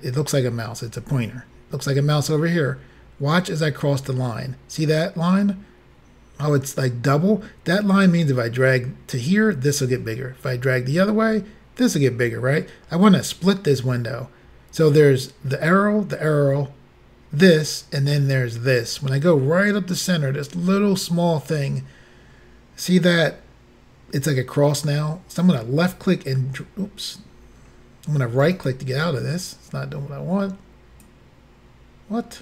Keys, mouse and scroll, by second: 25.6 click, 28.4 right click, 31.0 click.